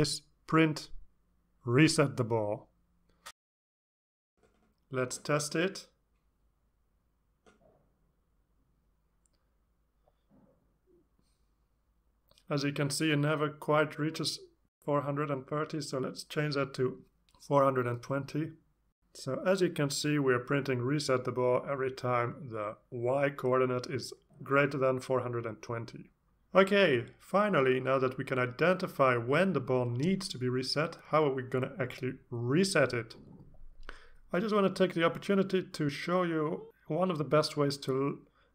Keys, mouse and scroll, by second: 0.0-2.8 typing, 5.3 click, 6.3 click, 7.5 click, 8.3-9.0 drag, 10.5 alt+Tab, 13.4 click, 15.2 click, 16.2 2, 17.0 click, 17.7-19.0 drag, 23.9 click.